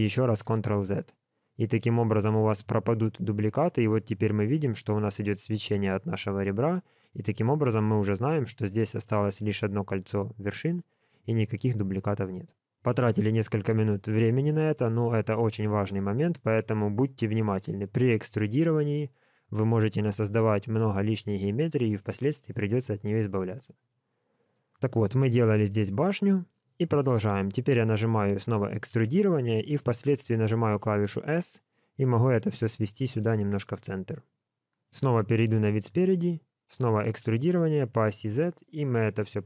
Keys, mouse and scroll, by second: 0.5 ctrl+z, 1.5-1.8 scroll up 3, 2.0 shift+middle click, 3.6-4.0 scroll up 2, 4.0 scroll down 1, 4.4 shift+middle click, 4.8 scroll up 2, 7.0-7.7 scroll down 3, 7.7 g, 10.7-12.1 scroll down 6, 13.5-13.9 scroll down 2, 13.9 shift+middle click, 23.8 middle click, 24.9 scroll up 2, 25.3 shift+middle click, 35.2 KP_1, 37.0 e.